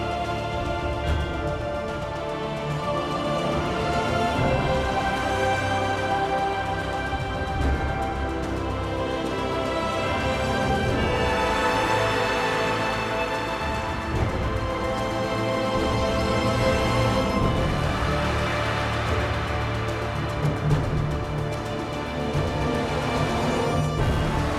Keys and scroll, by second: 0.0-0.1 typing, 1.1-1.9 typing, 3.3 r, 9.2 r, 15.9 r, 20.1 r.